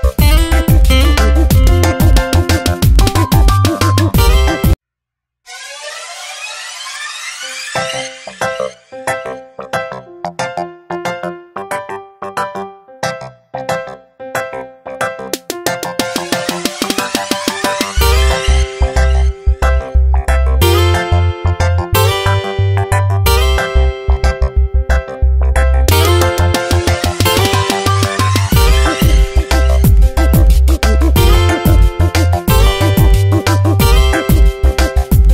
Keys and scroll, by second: 0.7 Tab, 2.2 Tab, 3.9 space, 8.2 space, 8.8 v, 10.4 Tab, 15.5 ctrl+z, 24.5 ctrl+g, 26.3 space, 28.6 ctrl+e, 30.0 space, 31.2 e, 34.3 Tab, 35.0 space.